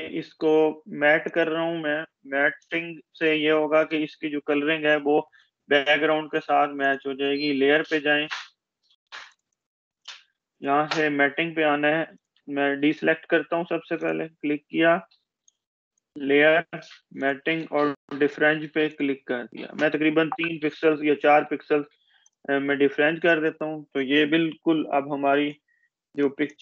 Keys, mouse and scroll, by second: 1.5 ctrl+click, 2.8 space, 3.1 click, 3.8 space, 7.8 click, 8.7-10.3 scroll down 1, 11.2 Escape, 11.8 click, 13.1 ctrl+d, 13.6 click, 20.5-21.1 scroll down 1, 22.1 click, 24.1 ctrl+=, 24.8 ctrl+=, 26.0 space.